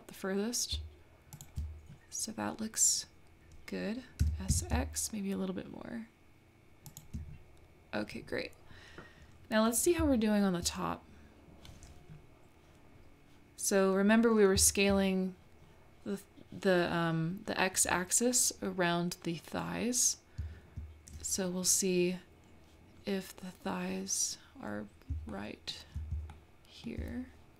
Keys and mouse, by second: 4.2 s, 14.5-17.6 middle drag, 21.1 middle click, 25.3 shift+middle click, 26.3 shift+middle click.